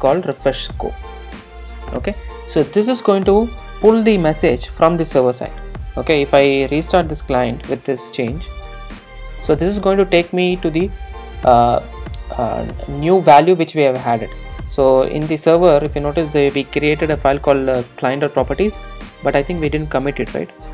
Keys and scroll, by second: 2.0 Return, 6.5 super+r.